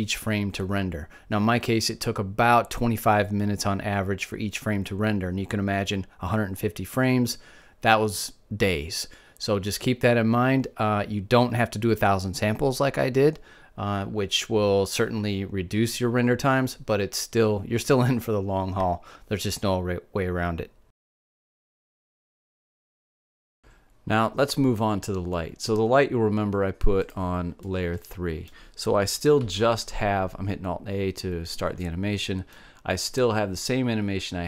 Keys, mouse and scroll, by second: 28.0 click, 28.9-29.9 drag, 30.4 alt+a, 32.9 middle click.